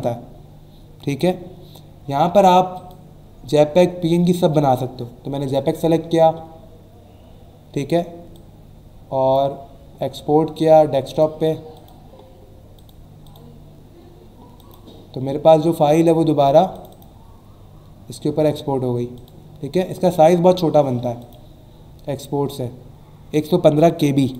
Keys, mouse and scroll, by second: 2.7 click, 5.4 click, 8.3 click, 11.1 click, 11.7 click, 12.7 click, 13.2 click, 14.5 click, 16.7 click, 19.1 click, 19.3 click, 19.9 right click, 21.2 click, 24.2 click.